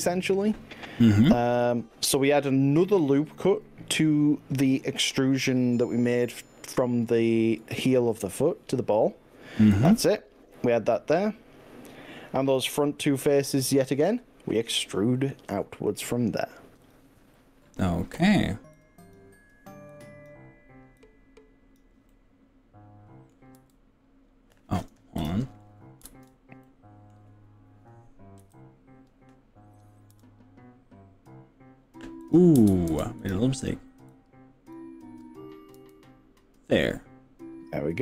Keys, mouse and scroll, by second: 0.8-5.3 middle drag, 7.8 ctrl+r, 15.9 click, 16.9 click, 17.4 middle click, 18.8 click, 19.9 click, 21.0 click, 22.1-23.5 middle drag, 23.7 e, 25.3 click, 26.1 ctrl+z, 26.6 middle click, 28.4 KP_3, 30.1 e, 32.2 click, 32.7 ctrl+z, 33.3 click, 34.1 click, 35.8 e.